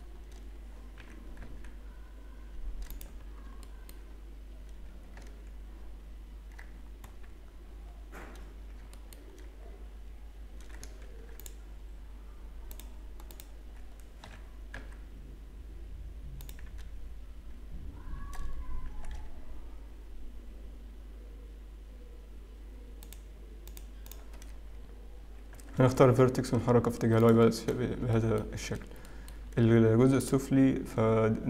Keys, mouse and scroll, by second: 0.3 scroll up 1, 1.5 g, 3.2 scroll down 1, 3.8 shift+middle click, 3.8 scroll down 1, 4.6 scroll up 2, 6.7 scroll down 1, 7.5-8.9 scroll down 8, 8.9 shift+middle click, 8.9 scroll up 7, 9.6 scroll up 1, 11.0 ctrl+r, 13.3 click, 14.7 g, 20.0 g, 23.6 click, 24.0 click, 25.8 g, 28.3 shift+middle click, 28.3-29.6 scroll down 10, 29.6 shift+middle click, 29.6 scroll up 5, 30.3 click.